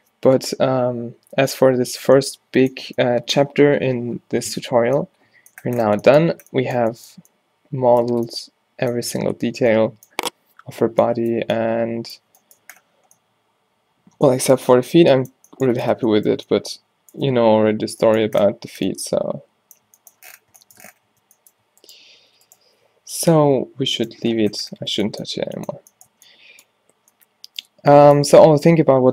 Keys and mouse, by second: 20.6 middle click, 21.1 Tab, 21.9 click, 22.2 g, 22.5 click, 23.1 click, 23.1 o, 23.6 g, 24.3 click, 24.9 Tab, 25.6 a, 26.2 a.